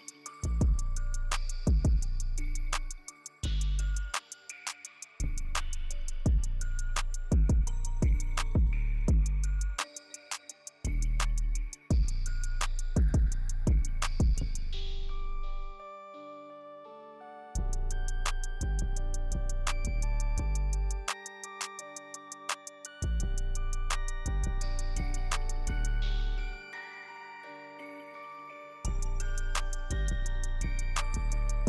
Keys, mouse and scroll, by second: 0.0-0.7 middle drag, 1.1 click, 1.1 g, 2.4 KP_7, 3.5 alt+d, 6.4 alt+d, 7.4-8.0 drag, 8.2 g, 9.7 KP_7, 10.7 alt+d, 13.9-14.4 middle drag, 14.6 drag, 15.1 g, 16.6-16.9 drag, 17.1 KP_7, 18.0 click, 19.0 alt+d, 20.8-21.2 drag, 21.5 g, 22.7-23.2 middle drag, 23.4 drag, 23.7 g, 26.6 g, 27.2 click, 27.9 g, 28.8 click, 30.3-30.7 drag, 31.1 drag.